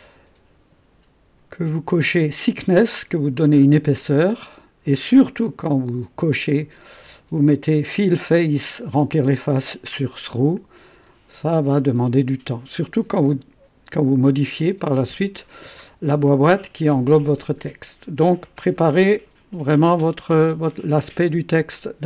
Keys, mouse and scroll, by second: 1.5 scroll up 2.